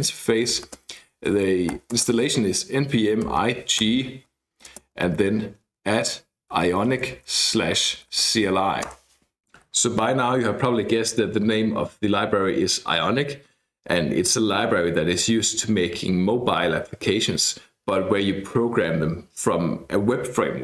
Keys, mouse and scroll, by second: 0.1-2.0 typing, 3.4 -, 3.8 g, 4.7 space, 5.1 @, 6.2-8.7 typing, 8.9 Return.